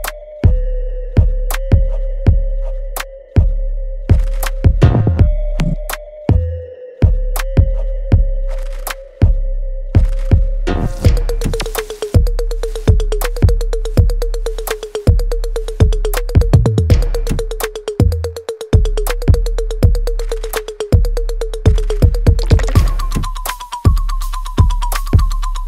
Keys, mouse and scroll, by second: 0.0 ctrl+s, 0.4 alt+right click, 1.1 alt+middle click, 1.6 alt+right click, 2.3 alt+middle click, 2.9 right click, 3.6 click, 5.7 right click, 6.6 click, 6.9-8.6 alt+right drag, 8.6 alt+right click, 9.2 right click, 10.2 click, 12.6 alt+right click, 12.9 alt+click, 13.8 alt+middle click, 14.7 alt+click, 15.1 alt+right click, 15.6 alt+click, 16.9 alt+right click, 17.3 alt+click, 17.7 alt+right click, 18.5 alt+click, 18.9 alt+right click, 20.1 shift+click, 21.7 shift+click, 23.3 click, 25.3-25.6 alt+right drag.